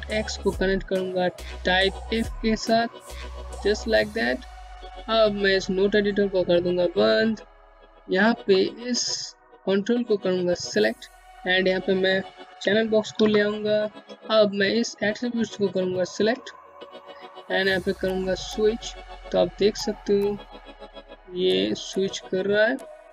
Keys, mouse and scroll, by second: 3.7-4.3 scroll down 1, 4.3 scroll up 1, 6.1 click, 11.0 alt+Num_Lock, 11.1 alt+c, 14.1 click, 15.6-16.1 scroll up 1, 16.1 middle click.